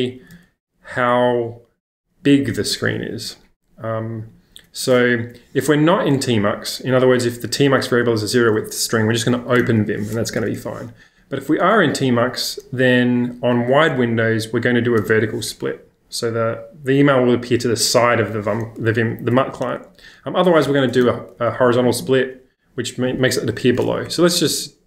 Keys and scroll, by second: 0.3 shift+v, 5.2 Escape, 5.4 k, 5.6 k, 7.4-9.6 typing, 10.4 Escape, 10.6 Escape, 11.1 j, 11.8 j, 15.0 shift+v, 19.8 j, 20.0 j, 20.1 j, 20.6 Escape, 21.0 shift+v, 24.1 shift+super+{.